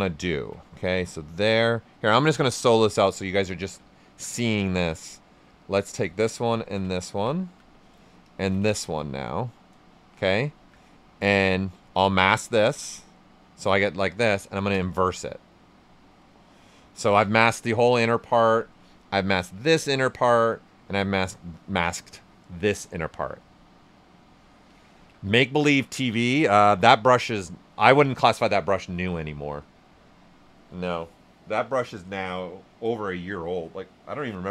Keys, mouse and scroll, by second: 2.2 click, 2.7 ctrl+right click, 6.2 ctrl+shift+click, 6.9 ctrl+shift+right click, 10.2 shift+f, 10.4 alt+right click, 11.3 ctrl+click, 11.6 right click, 12.6 ctrl+shift+click, 12.9 right click, 13.8 right click, 14.5 ctrl+click, 15.1 right click, 23.3 right click, 23.4-26.2 alt+right drag.